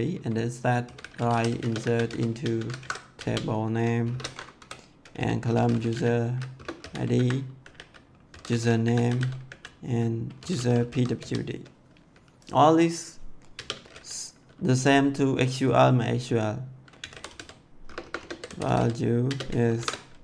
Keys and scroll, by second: 0.8-4.1 typing, 2.7 ctrl+v, 4.6 Left, 5.5-11.1 typing, 13.4 space, 16.9-20.1 typing.